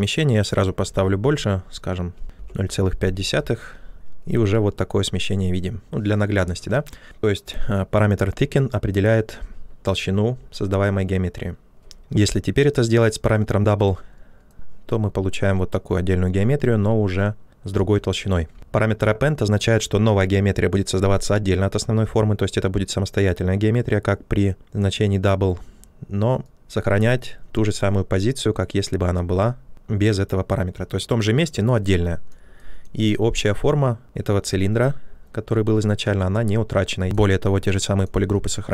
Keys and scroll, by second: 1.8-2.7 typing, 3.9 ctrl+z, 11.6 ctrl+z, 18.5 ctrl+z.